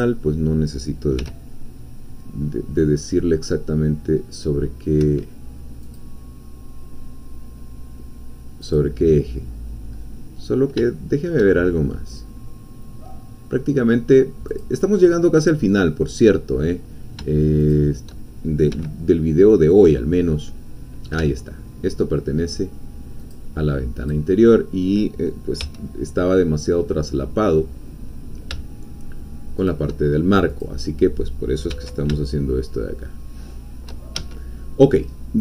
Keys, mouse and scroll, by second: 0.0 shift+click, 1.2 g, 5.1 Escape, 5.8 click, 8.6 click, 9.9-10.4 scroll up 1, 10.9 shift+middle click, 11.0 shift+click, 11.4 shift+middle click, 11.7 shift+scroll up 2, 14.6-17.2 drag, 17.6 shift+click, 18.7 g, 23.2-24.3 drag, 25.6 g, 29.6 shift+click, 30.6-31.7 drag, 31.7 g, 34.1 shift+Escape.